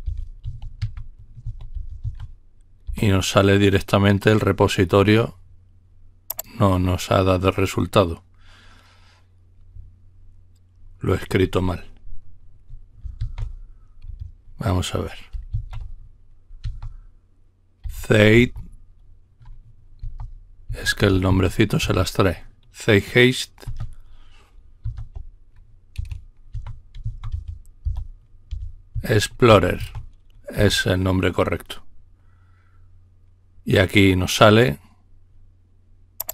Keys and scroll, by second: 0.0-2.5 typing, 2.8 Return, 5.4 typing, 13.2 typing, 15.5 typing, 16.6 typing, 17.8-18.4 typing, 20.0-21.8 typing, 24.8 typing, 25.9-29.8 typing, 30.6 Return, 33.1 typing.